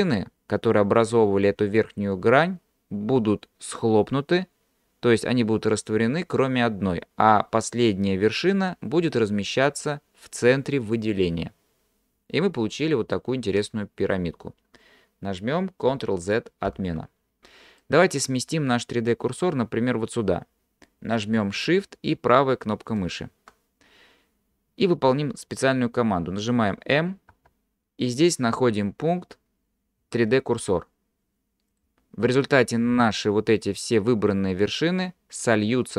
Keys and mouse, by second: 16.7 ctrl+z, 17.8 middle click, 23.0 shift+click, 27.3 m.